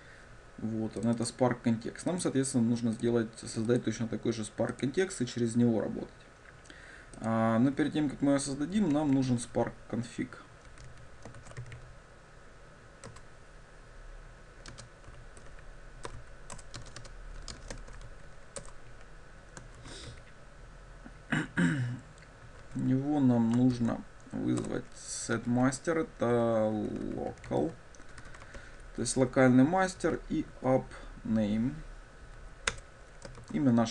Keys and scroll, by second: 13.3 Return, 24.7 Return, 32.8 Return.